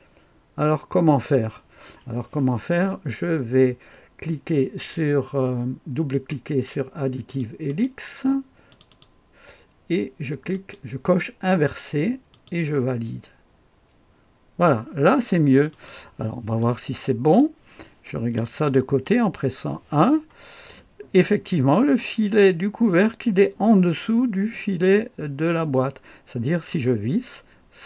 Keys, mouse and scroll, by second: 7.3 click, 7.7 click, 8.7 click, 8.9 click, 10.5 click, 12.3 click, 15.7 click, 16.4-17.4 drag, 18.4 KP_1, 19.4-22.6 scroll up 1, 26.9-27.8 scroll down 1.